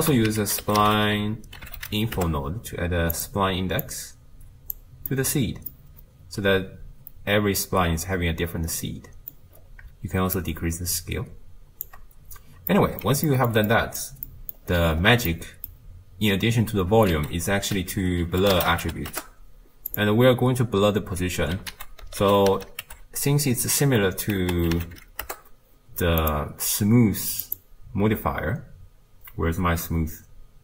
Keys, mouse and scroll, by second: 2.3 ctrl+a, 4.8 click, 5.7-8.7 middle drag, 10.6-19.1 shift+drag, 19.1 ctrl+a, 25.4 o.